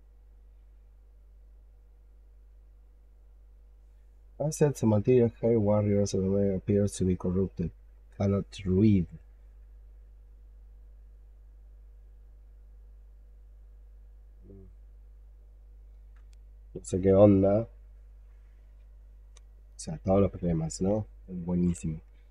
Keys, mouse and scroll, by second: 22.2 alt+click.